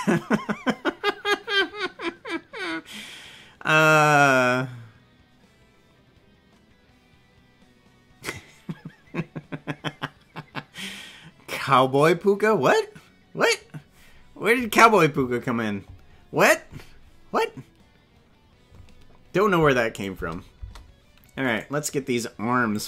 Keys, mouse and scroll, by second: 19.9 click, 20.1 space, 20.6 space, 21.6 right click, 22.7-22.8 drag.